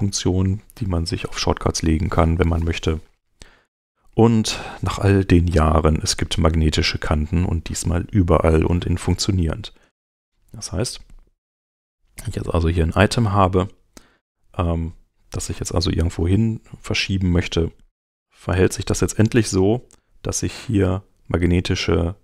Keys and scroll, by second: 6.7 super+Tab.